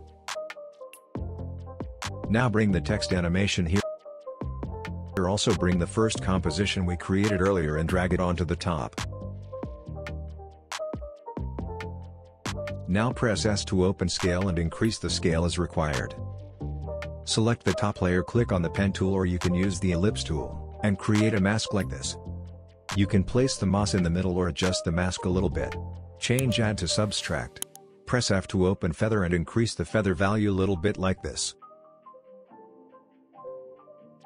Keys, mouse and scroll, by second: 0.7-3.3 drag, 11.1 alt+scroll down 1, 13.2 s, 13.8-16.0 drag, 19.4-22.3 alt+drag, 28.4 f, 29.9-34.2 drag.